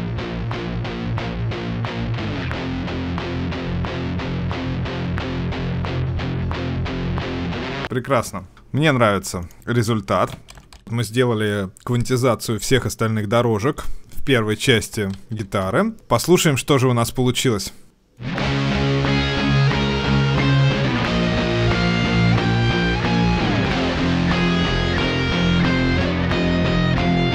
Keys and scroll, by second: 10.7 ctrl+alt+Left.